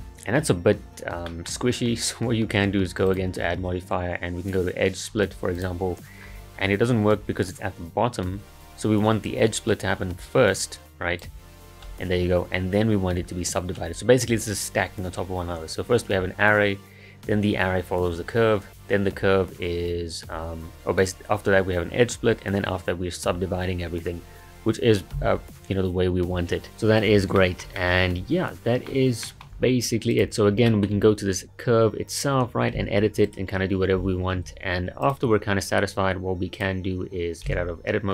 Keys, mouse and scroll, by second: 0.8-1.3 scroll down 1, 1.3 middle click, 1.6-3.1 scroll up 2, 5.7-6.1 drag, 6.2-9.3 scroll down 9, 9.3-11.2 drag, 13.9-16.2 scroll up 1, 16.2-17.0 scroll up 1, 18.6-21.6 scroll down 1, 22.2 scroll down 2, 26.8-27.4 scroll down 2, 27.4-30.1 shift+middle drag, 30.1 click, 30.7-32.8 shift+middle drag, 32.8 Tab, 33.2-34.4 right drag, 34.4 Escape, 35.0 click, 36.5 click, 37.5 Tab.